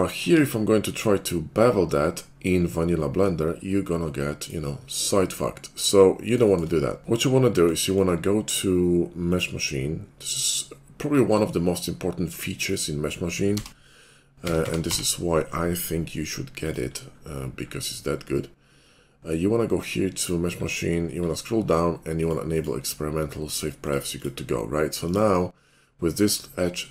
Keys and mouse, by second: 0.3 ctrl+b, 3.3-9.3 middle drag, 9.3-26.9 drag.